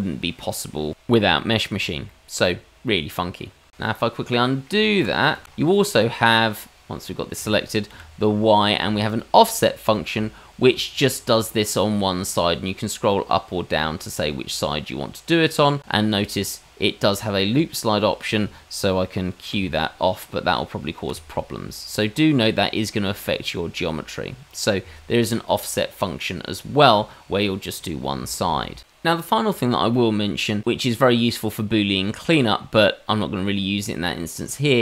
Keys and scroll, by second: 4.3-5.0 ctrl+z, 5.3 ctrl+z, 7.9 y.